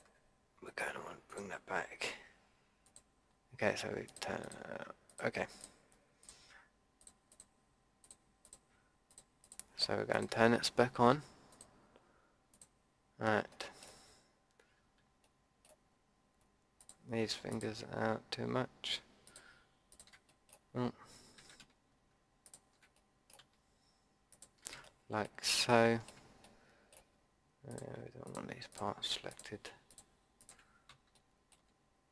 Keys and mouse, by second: 13.2-14.8 middle drag, 16.7-22.4 middle drag, 21.3 ctrl+z, 23.0-26.4 middle drag, 26.4 click, 26.6 middle click, 26.7 click, 27.7-32.1 middle drag.